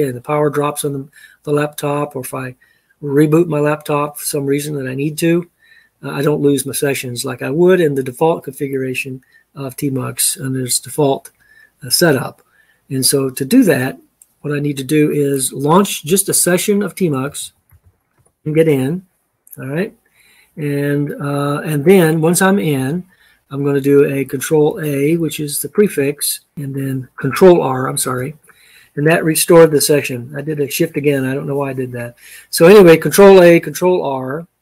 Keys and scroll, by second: 17.0-18.3 typing, 26.5 ctrl+a, 26.5 shift+r, 27.8 ctrl+a, 27.8 ctrl+r.